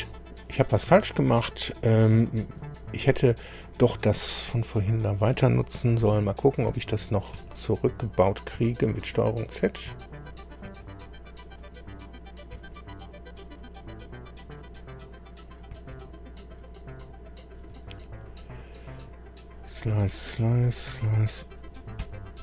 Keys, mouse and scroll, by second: 6.0 ctrl+z, 6.8 ctrl+z, 7.4 ctrl+z, 8.6 ctrl+z, 9.9 ctrl+z, 10.7 ctrl+z, 12.6 ctrl+z, 15.7 ctrl+z, 22.0 ctrl+z.